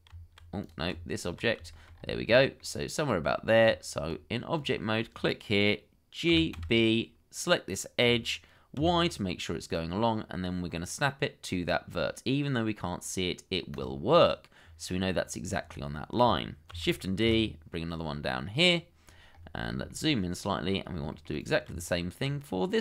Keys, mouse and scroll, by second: 0.1 Tab, 1.7 shift+middle click, 1.9-2.3 shift+scroll up 1, 2.3 shift+middle click, 3.6 Tab, 6.3 g, 6.5 b, 8.7 y, 14.1-14.6 scroll down 1, 16.7 shift+d, 17.2 y, 19.2-19.6 scroll up 1, 19.9 shift+middle click, 20.5-20.9 scroll up 1, 21.1 shift+middle click, 21.7 Tab.